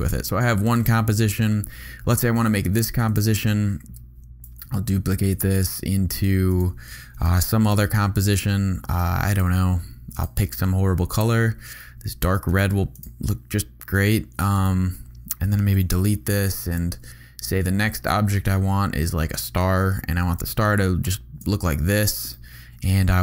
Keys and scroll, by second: 4.4 super+d, 7.2 super+y, 15.7 BackSpace, 20.5 shift+v, 21.5 v.